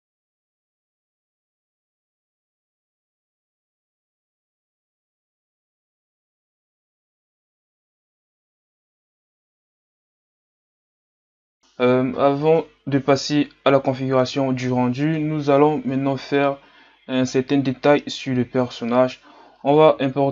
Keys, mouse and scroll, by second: 0.5 ctrl+r, 0.8 s, 1.1 alt+right click, 1.4 s, 2.0-3.1 scroll up 2, 3.5 alt+right click, 3.6 s, 3.7 Tab, 3.8 a, 3.9-4.3 scroll down 4, 4.3 click, 4.8 scroll up 7, 5.0 Tab, 5.2 alt+right click, 5.4 click, 5.6 alt+right click, 6.1 click, 6.3 alt+right click, 6.4-9.9 typing, 6.6 click, 6.8 Tab, 6.9 scroll down 7, 7.2 scroll up 6, 7.4 click, 7.5 Tab, 7.6 alt+right click, 8.2 alt+right click, 8.6 Tab, 8.8 middle click, 9.0 scroll up 3, 9.1 middle click, 9.2 Tab, 9.3 alt+right click, 10.0 scroll up 1, 10.1 alt+right click, 10.2 click, 10.4 Tab, 10.5-11.1 scroll down 5, 11.1-11.5 scroll up 1, 11.5 click, 13.9-15.0 scroll down 5, 16.1 scroll up 3, 17.6-19.1 scroll up 4, 19.6-20.2 scroll down 3.